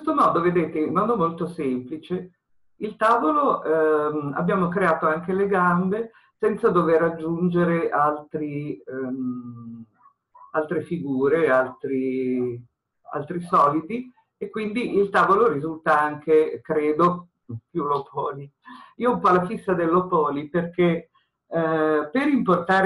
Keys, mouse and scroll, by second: 15.5-16.3 scroll down 2.